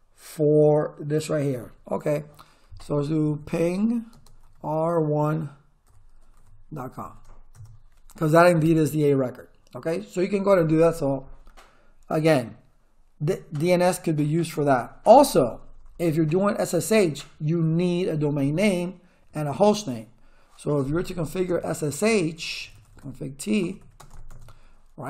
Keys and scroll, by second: 3.0-4.4 typing, 5.6-7.5 typing, 7.5 Return, 15.1 Return, 21.6-24.1 typing, 24.3 Return.